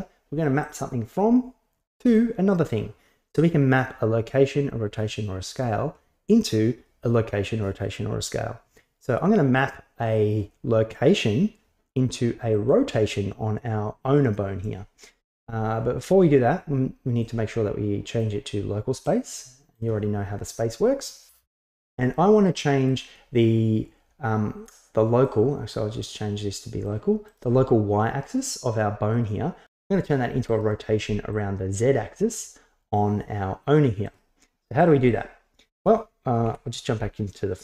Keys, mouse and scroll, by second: 0.7 click, 2.2 drag, 12.5 click, 17.3-18.2 drag, 19.2-19.8 drag, 21.8-22.2 middle drag, 22.9 click, 25.3-26.1 drag, 26.9 click, 30.1 click, 31.3 click, 34.1 click, 34.8-36.5 drag, 36.5 KP_1.